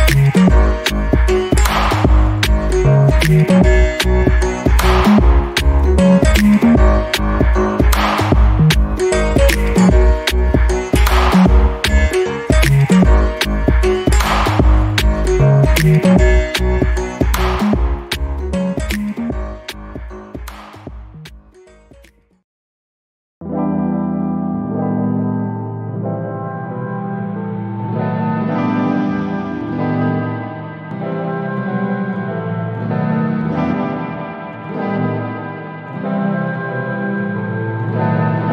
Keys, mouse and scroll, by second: 2.7 middle click, 5.1 click, 7.4 scroll down 1, 7.8 alt+middle click, 8.1-8.6 alt+scroll up 2, 8.6 alt+middle click, 9.3 click, 10.1 1, 10.2 2, 10.4 Return, 11.7 alt+middle click, 12.7 click, 14.0 click, 15.8 scroll up 1, 16.9 click, 28.7 alt+middle click, 29.5 click, 30.9 BackSpace, 31.4 click, 31.7 BackSpace, 32.1 click, 32.3 BackSpace, 33.3 click, 37.5 alt+middle click, 38.4 click.